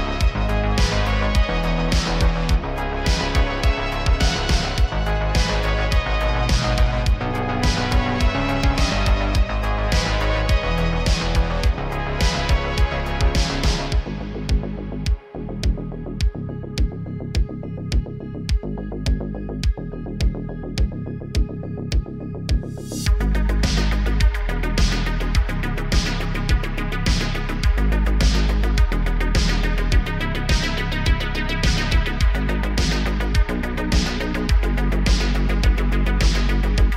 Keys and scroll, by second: 3.4 Tab, 4.5 ctrl+r, 6.3 ctrl+r, 7.5 ctrl+r, 10.2 ctrl+b, 13.3 e, 13.6 alt+s, 17.0-17.5 typing, 19.3 Tab, 23.2 Tab, 24.2 1, 25.9 s, 30.2 i, 31.2 i, 32.3 e, 33.0 s, 33.6 g, 33.8 z, 34.1 Tab, 35.2 Tab, 35.8 g, 36.1 z.